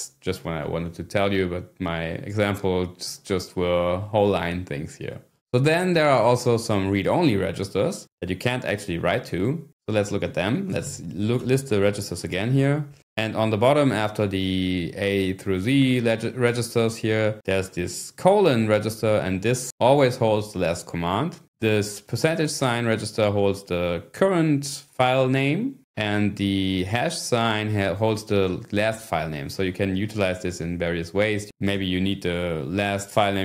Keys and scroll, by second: 10.0-11.3 typing, 11.4 Return, 31.8 Return.